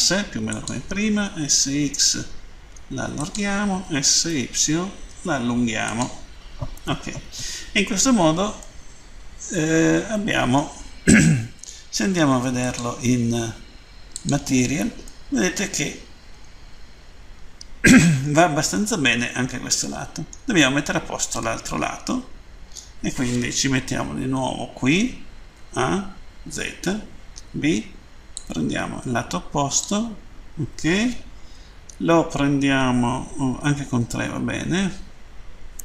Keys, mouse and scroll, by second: 0.3 click, 1.1 typing, 2.1 typing, 3.1 click, 3.8-4.5 typing, 5.8 click, 8.5 middle click, 12.6 click, 14.1 click, 15.0 middle click, 21.4 middle click, 23.6 End, 28.4 click, 33.6 Page_Down.